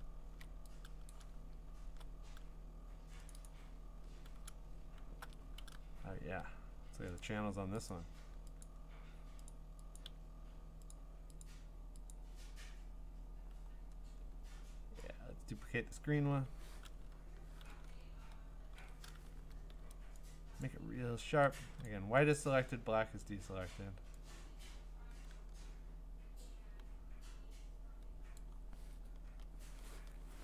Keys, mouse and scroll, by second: 0.0-1.1 scroll, 1.1 middle click, 1.1 click, 1.3-1.9 middle click, 1.4 middle click, 1.8 middle click, 1.9 middle click, 3.3 click, 3.4 click, 3.9 scroll, 4.5-5.0 scroll, 7.2 click, 7.9 click, 8.6 click, 9.5 click, 10.0 click, 10.9 click, 11.4 click, 12.1 click, 15.9 click, 18.6 ctrl+i, 20.6 click, 21.9 click, 22.3 click, 23.2 click, 28.4 click, 29.3 Return.